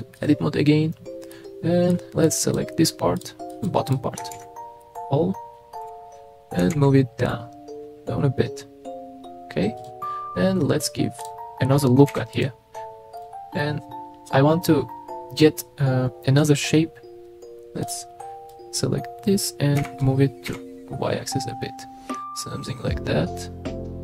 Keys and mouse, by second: 1.3 middle click, 2.3 click, 3.2 click, 3.6 click, 4.3 alt+z, 4.9 click, 5.8 KP_3, 6.6 g, 6.7 z, 9.8 click, 12.1 ctrl+r, 13.2 click, 17.8 click, 18.6 click, 19.8 g, 20.5 y.